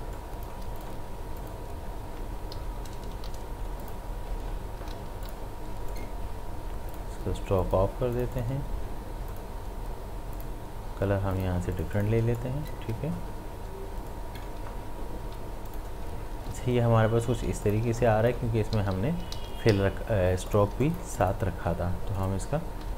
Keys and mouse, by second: 0.2 click, 0.5 space, 0.8 click, 2.6 ctrl+shift+], 3.1 v, 3.8 click, 4.8 ctrl+z, 5.1 v, 5.3 click, 12.2 space, 12.4 click, 12.7 space, 14.1 click, 15.1 ctrl+z, 15.7 click, 16.0 space, 17.4 space, 17.6 ctrl+alt+click, 18.0 ctrl+click, 18.4 space, 18.7 ctrl+z, 20.5 click, 20.7 space, 20.9 click.